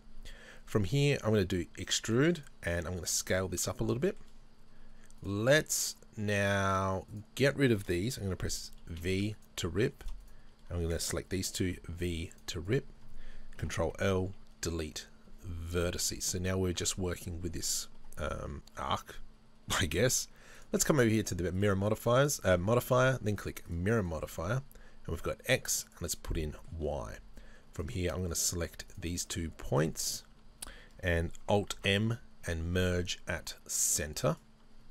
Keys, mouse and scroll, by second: 1.3 e, 2.5 right click, 2.9 s, 4.1 click, 4.1 shift+middle click, 5.2 right click, 7.1 shift+right click, 8.9 v, 9.5 right click, 10.0 shift+right click, 12.3 v, 12.7 right click, 13.6 ctrl+l, 14.6 Delete, 17.7-20.6 shift+middle drag, 20.6-24.1 drag, 24.1-25.9 shift+middle drag, 25.9 click, 26.4-27.8 shift+middle drag, 27.8 right click, 28.3 shift+right click, 28.6 shift+right click, 28.9 shift+right click, 29.7-31.7 shift+right drag, 31.8 alt+m.